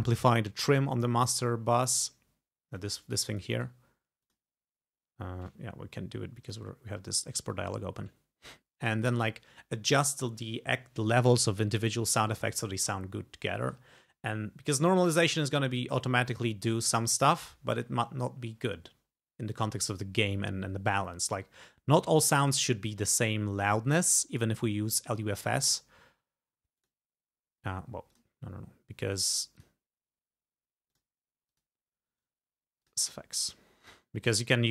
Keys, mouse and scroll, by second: 2.8-3.9 drag, 3.6 right click, 4.3 click, 6.5 click, 7.5-9.1 drag, 26.8 click, 28.2 click, 29.7 click, 31.0 click, 31.5 click, 32.9 click, 33.9 click.